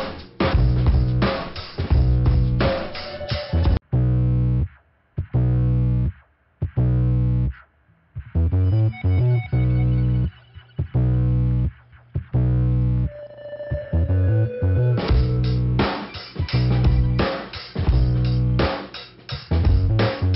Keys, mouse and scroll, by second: 0.7 click, 1.5 click, 2.2 click, 3.7 click, 5.4 middle click, 7.5 scroll up 2, 9.1 scroll up 1, 9.5 click, 10.7 right click, 13.2 click, 14.4 click, 14.9 click, 15.4 click, 16.0 click, 16.6 click, 17.3 click, 18.0 click, 19.5 click.